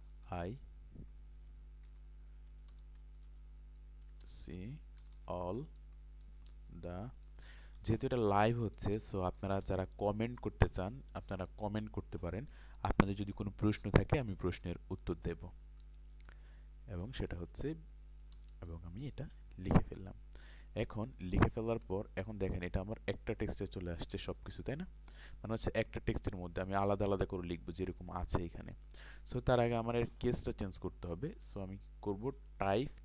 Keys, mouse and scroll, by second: 0.5 Return, 1.3 BackSpace, 2.7-9.6 typing, 3.2 Return, 15.8 Return, 16.8-19.3 typing, 20.4 click, 21.2 space, 23.9 click, 27.5-28.5 scroll up 1, 32.3 click.